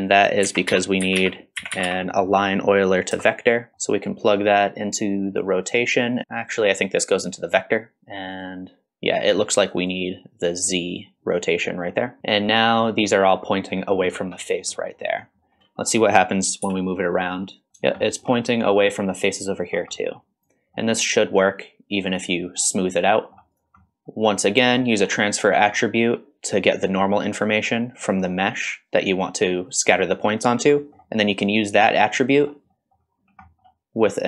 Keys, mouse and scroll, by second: 0.0 click, 0.4 shift+a, 3.7 middle click, 3.7 scroll down 1, 4.4-5.4 drag, 6.6-8.0 drag, 9.9-11.9 drag, 11.9-12.8 middle drag, 12.2 scroll down 2, 13.5-13.9 middle drag, 14.2 scroll down 1, 14.4-14.9 middle drag, 15.0 middle click, 15.1-15.5 scroll down 2, 15.6 middle click, 16.6 g, 17.7 scroll up 3, 18.0 shift+middle drag, 18.4-18.7 middle drag, 19.7 scroll down 1, 19.9 middle drag, 20.4 click, 20.8 middle click, 22.0 click, 22.5-23.0 scroll up 3, 23.0-23.4 middle drag, 23.5-23.8 drag, 23.8 middle click, 23.9 scroll down 2, 24.1 shift+middle click, 24.5 shift+scroll up 2, 24.8 shift+middle click, 25.2-25.5 scroll up 2, 25.5 middle click, 27.5 middle click, 30.4-30.7 scroll down 2, 30.8 middle click, 32.0 middle click, 32.7 middle click, 33.2 scroll up 2, 33.4 middle click.